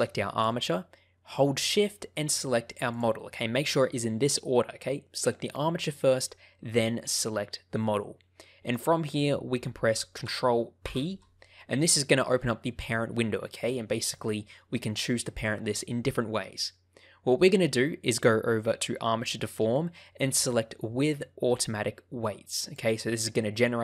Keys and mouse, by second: 7.8 middle click, 10.7 ctrl+p.